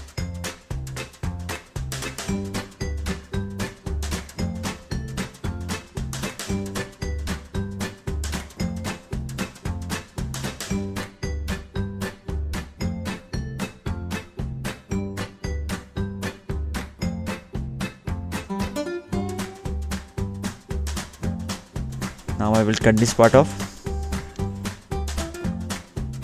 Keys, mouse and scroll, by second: 0.4 middle click, 1.8 scroll down 2, 4.8 scroll up 2, 6.5 scroll up 1, 6.6 middle click, 7.3-7.6 scroll up 1, 7.6-8.1 scroll down 2, 14.9 click, 17.4-17.7 scroll up 2, 18.7 middle click, 20.6-21.1 scroll down 2, 21.7 click, 23.0 click.